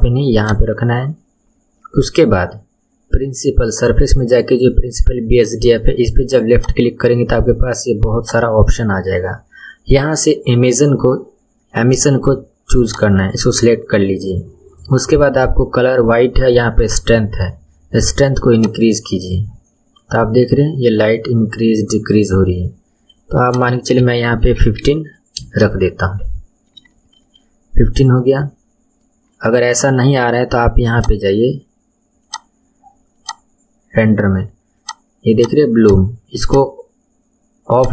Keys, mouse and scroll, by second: 0.4 click, 0.9 scroll down 3, 6.5-11.4 drag, 18.5-21.6 drag, 23.4-25.9 drag, 25.9-26.9 scroll down 4, 26.9-27.5 shift+middle drag, 27.5-30.5 scroll down 1, 30.9 click, 32.2 click, 33.2 click, 34.8 click, 35.4 click, 35.8 click, 36.5 click, 37.7 click.